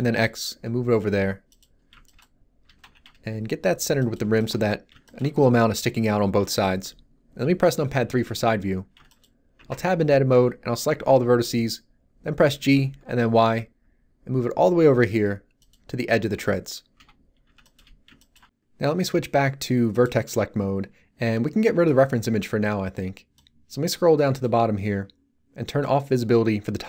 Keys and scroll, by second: 2.6 g, 2.8 x, 7.9 3, 9.5 Tab, 9.9 a, 12.5 g, 13.3 y, 16.9 1.